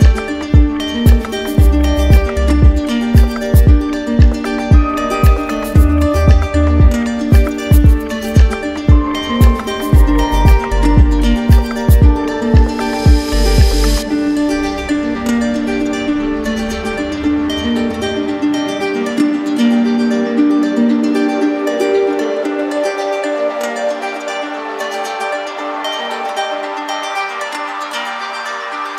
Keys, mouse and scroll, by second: 0.3 click, 4.1 click, 5.5 click, 6.3 click, 6.9 click, 7.4 click, 8.8 shift+click, 8.8 alt+click, 9.5 click, 10.0 alt+click, 10.8 click, 11.4-12.6 alt+drag, 16.9 click, 17.4 alt+click, 17.9 click, 18.3 click, 19.0 alt+click, 19.4 alt+click, 20.2 click, 28.3 click.